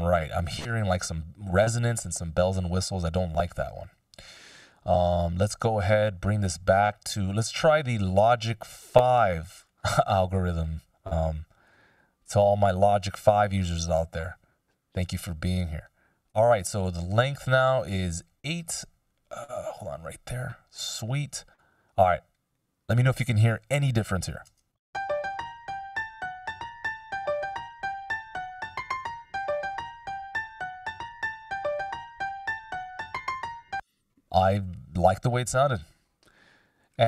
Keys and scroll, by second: 1.0 super+z, 24.6 shift+space, 29.9 F16, 33.2 space, 33.8 super+z.